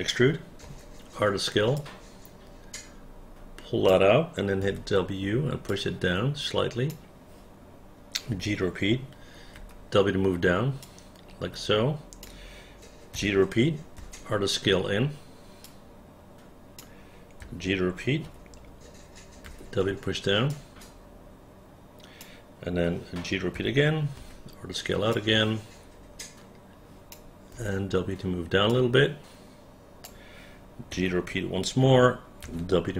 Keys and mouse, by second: 0.8 r, 1.9-4.0 drag, 4.8 w, 5.8-7.0 drag, 8.5 g, 9.7 w, 11.0-12.4 drag, 13.3 g, 14.1 r, 15.8-16.9 drag, 17.5 g, 18.4 r, 19.6 w, 20.6-22.3 drag, 23.7 g, 24.3 r, 25.2-27.2 drag, 27.7 w, 31.0 g, 32.6 w.